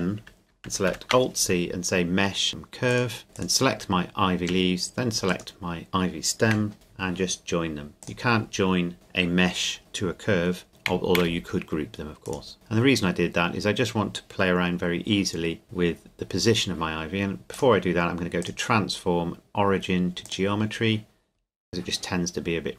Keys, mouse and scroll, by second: 0.5 alt+c, 2.9 click, 3.3 right click, 5.3 shift+right click, 8.0 click, 11.1 a, 12.3 right click, 12.5-13.2 scroll down 1, 17.5-20.3 scroll down 1, 22.5 click.